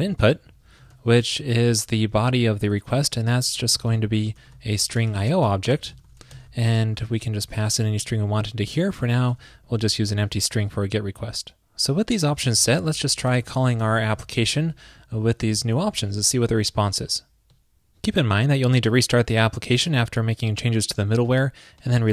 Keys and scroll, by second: 1.3 super+Right, 8.2 super+Right, 9.4 super+s, 15.1 super+/, 15.6 super+s.